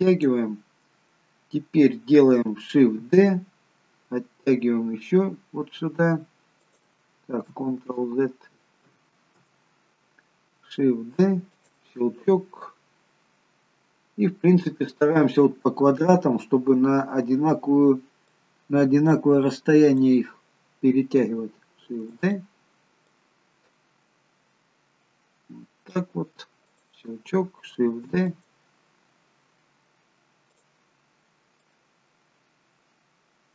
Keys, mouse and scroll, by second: 3.0 shift+d, 7.8 ctrl+x, 9.2 ctrl+z, 11.0 shift+d, 12.6 click, 18.3 click, 21.9 shift+d, 23.2 click, 26.7 click, 28.0 shift+d, 28.3 click, 30.5 click.